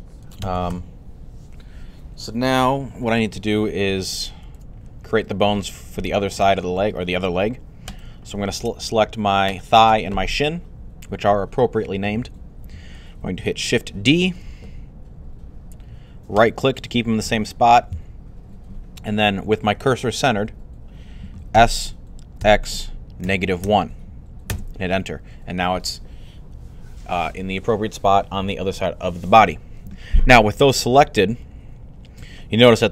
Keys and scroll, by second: 0.5 typing, 14.0 d, 21.3-23.5 typing.